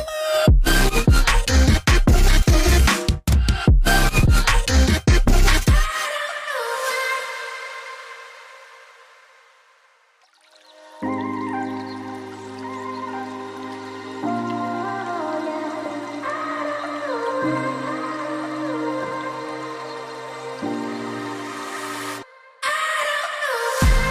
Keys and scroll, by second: 3.3 v, 5.7 ctrl+alt+2, 13.0 ctrl+2, 13.3 a, 13.6 g, 18.7 v, 21.3 a.